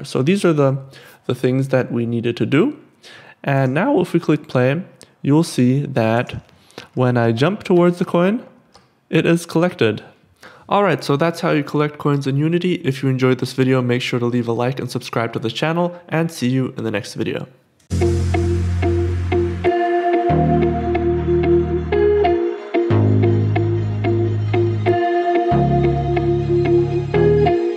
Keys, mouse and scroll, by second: 5.5 click, 16.3 click.